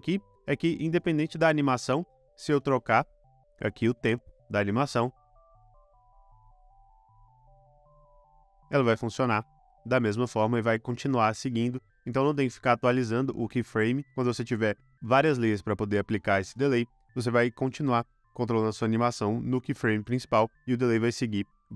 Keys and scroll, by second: 0.8 space, 3.9 space, 10.7 space, 11.3 super+z.